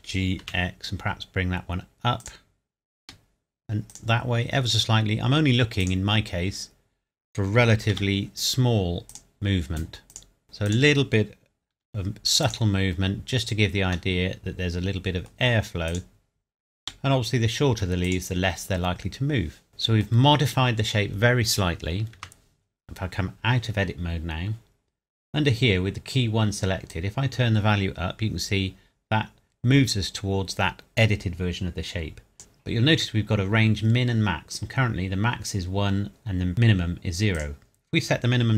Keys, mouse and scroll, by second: 0.4 x, 2.2 click, 3.0 g, 3.9 click, 7.9 g, 9.1 click, 11.7 g, 12.5 click, 14.1 middle click, 15.9 click, 16.8 g, 18.1 click, 19.7 middle click, 22.1 Tab, 26.9 click, 37.3 click.